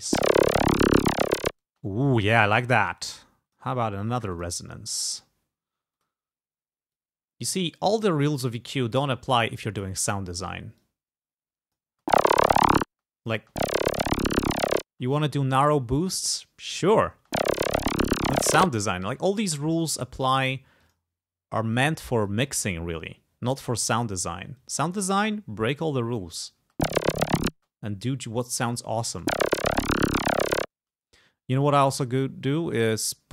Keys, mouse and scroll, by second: 0.1 space, 1.0 click, 1.8 space, 2.4 click, 3.0 click, 4.4 click, 6.0 click, 7.0 click, 7.9-8.9 scroll up 4, 9.3 click, 10.4 scroll down 2, 10.8-12.0 drag, 12.0 space, 12.8 click, 12.9 space, 14.9 space, 17.2 space, 18.8 space, 19.8 click, 20.9 click, 21.8 click, 22.3 click, 22.9-24.1 scroll up 1, 24.6 click, 25.1-25.6 scroll up 2, 25.9 click, 26.7 space, 27.6 space, 27.7-29.3 drag, 29.2 space, 30.9 space, 31.7 click, 32.8 click.